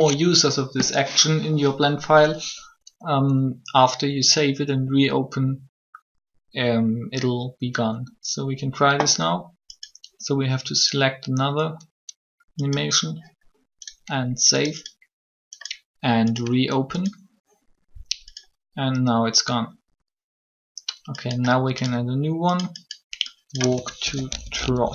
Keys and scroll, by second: 23.9 shift+t.